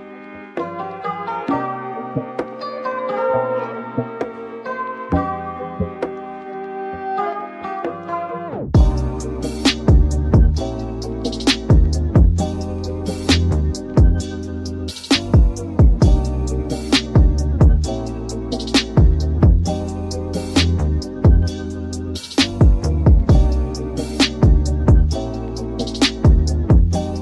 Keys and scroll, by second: 1.9 super+z, 4.7 super+[, 4.9 super+], 12.0 super+[, 14.9 super+z, 15.7 alt+Right, 26.5 alt+Right.